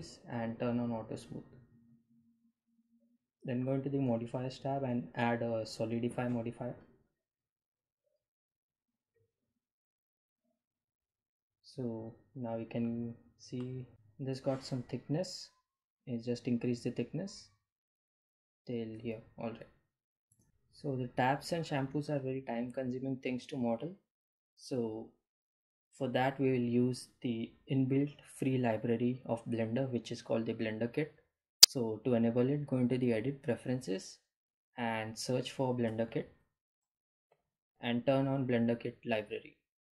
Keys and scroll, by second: 17.0 Tab, 30.6 b, 30.8 e, 30.9 l, 31.9 Num_Lock, 33.0 BackSpace, 34.3 Num_Lock, 35.4 b, 35.7 e, 35.8 n.